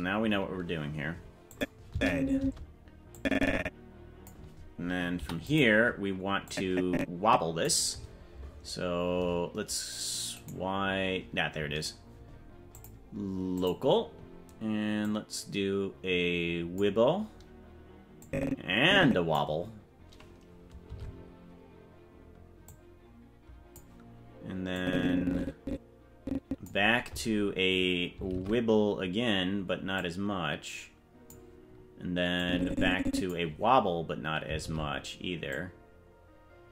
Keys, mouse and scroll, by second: 1.5 click, 1.9 space, 2.4 space, 3.1-4.3 drag, 5.1 i, 6.4-7.6 drag, 10.5 right click, 12.7-13.8 drag, 15.0-16.8 drag, 18.2-19.3 drag, 20.9 alt+r, 22.6-23.8 drag, 24.7-26.7 drag, 28.3 alt+r, 29.9-31.3 drag, 32.3 click, 34.6 alt+r, 35.5-36.7 drag.